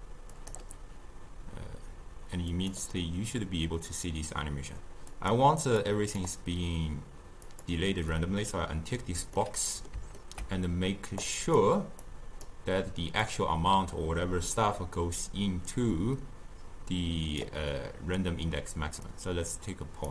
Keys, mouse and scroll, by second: 0.4-5.9 drag, 7.5 click, 9.4-11.3 middle drag, 11.3 click, 12.1 click, 13.3-16.5 drag, 19.2-20.1 drag.